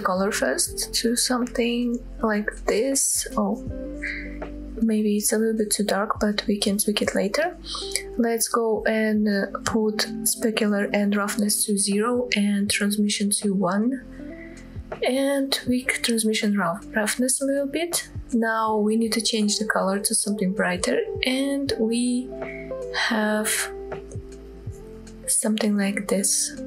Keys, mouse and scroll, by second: 5.4 click, 6.2-6.6 scroll down 1, 6.6-7.0 scroll up 1, 7.0 middle click, 8.3 scroll down 2, 10.0 click, 10.9 click, 13.0-14.0 drag, 15.3-17.0 drag, 17.0-18.2 scroll up 8, 18.2 click, 26.3 click.